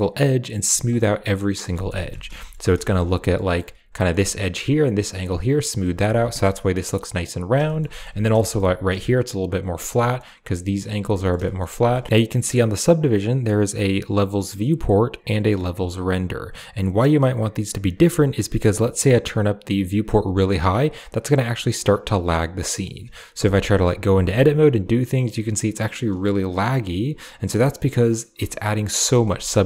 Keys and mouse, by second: 0.7-1.1 middle drag, 1.1-1.5 drag, 1.1-1.5 right drag, 1.6 shift+middle drag, 1.8 middle click, 2.0 Tab, 2.0 typing, 2.2 shift+middle click, 2.7 shift+middle click, 3.1 click, 3.3 click, 3.8 click, 5.7 click, 6.0 Tab, 7.2 click, 7.5 shift+middle drag, 7.8 middle click, 8.0 Tab, 8.3 shift+middle click, 9.9 click, 10.9 Tab, 11.0 drag, 11.3 shift+drag, 11.6 drag, 11.9 shift+middle drag, 17.8 click, 18.5 click, 18.7 click, 18.9 click, 19.6-20.2 drag, 21.8 click, 22.3-22.7 middle drag, 23.6 Tab, 24.0 g, 28.5 click, 28.8 shift+middle click.